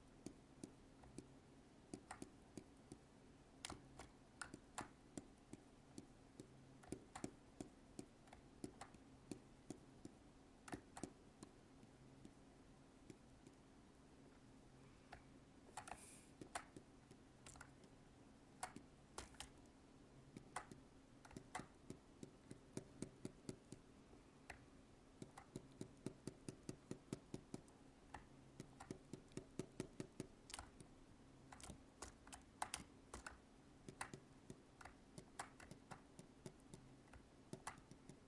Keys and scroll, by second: 17.6 alt+space, 30.7 alt+space.